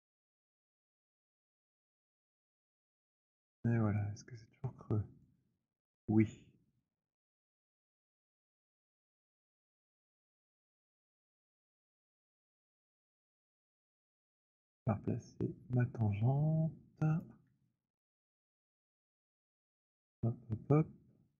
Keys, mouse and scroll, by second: 0.0-3.4 typing, 3.4 middle click, 5.3 alt+click, 6.1 alt+middle click, 8.2 alt+click, 12.2-13.3 scroll, 13.6 click, 17.3 click, 17.9 alt+middle click, 18.3-18.8 scroll, 19.0 click.